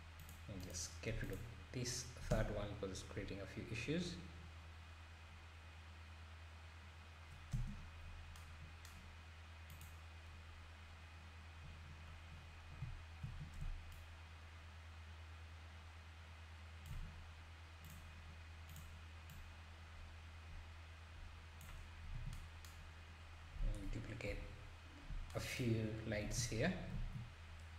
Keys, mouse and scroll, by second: 0.2 click, 0.6 click, 1.1 x, 2.3 space, 5.5-7.5 scroll down 2, 7.5 space, 7.7-8.4 scroll up 6, 9.7 click, 12.3-12.7 scroll up 2, 14.0-17.8 shift+right drag, 17.8 click, 18.7 drag, 24.2 KP_7, 25.8-26.2 scroll down 1, 26.3 alt+d.